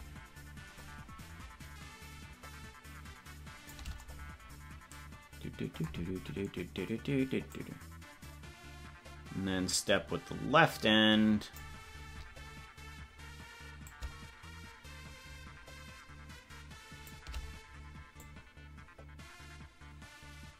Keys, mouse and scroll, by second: 7.6-11.9 drag, 13.8-17.1 shift+drag, 18.3-20.5 drag.